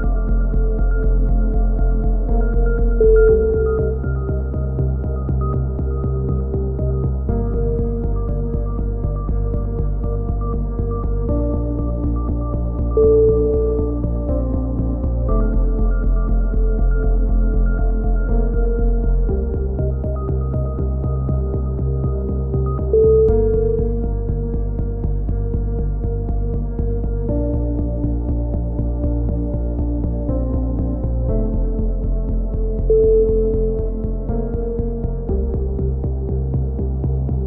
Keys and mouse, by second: 0.0 z, 4.5 right drag, 4.5 f, 4.5 z, 4.7 z, 5.1 right click, 6.6-8.3 typing, 7.4-8.2 right drag, 8.8-9.2 drag, 10.0-12.4 drag, 12.5 e, 12.8 click, 13.7-16.7 drag, 16.1-21.3 right drag, 16.7 f, 16.7 z, 20.8 z, 21.3 e, 22.1-23.9 drag, 23.9 right click, 23.9 f, 23.9 a, 24.1-26.1 drag, 26.1 right drag, 26.1 f, 26.1 a, 26.4-27.0 drag, 28.2 KP_1, 28.6-29.3 drag, 29.1 z, 29.3 middle click, 36.1-37.4 drag.